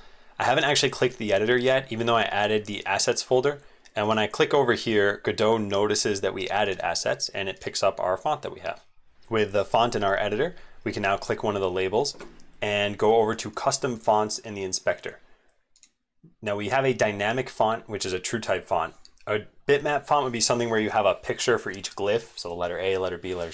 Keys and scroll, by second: 9.3 super+2, 9.3 ctrl+shift+z, 22.3 ctrl+z.